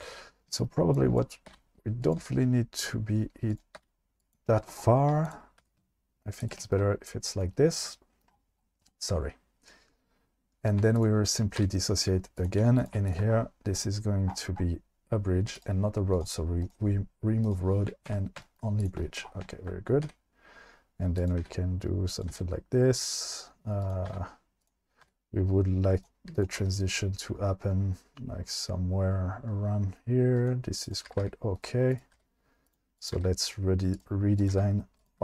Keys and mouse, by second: 1.5 r, 2.2 g, 3.5 click, 3.8 r, 4.2 click, 5.6 g, 11.6 v, 12.6 2, 13.1 shift+click, 15.6-16.2 drag, 18.1 1, 18.8 click, 20.0 e, 21.2 click, 21.4 e, 22.3 e, 24.1 e, 24.6 click, 25.1 e, 26.6 g, 30.8 click, 31.0 g, 31.2 g, 32.1 g, 33.0 click, 33.2 g, 33.9 click, 34.4 click, 34.5 g, 35.0 click.